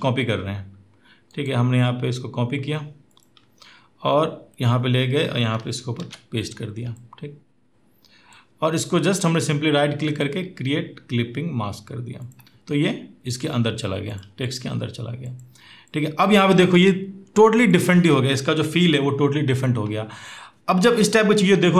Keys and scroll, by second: 5.8 ctrl+v.